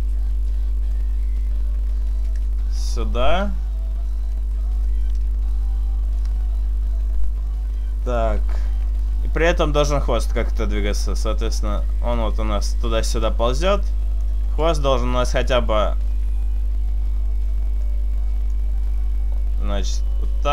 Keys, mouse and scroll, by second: 0.2 middle click, 2.5 i, 4.4 middle click, 7.8 middle click, 10.9 click, 15.2 right click, 15.6 shift+middle click, 16.0-16.7 scroll up 2, 17.8 click, 19.8 r.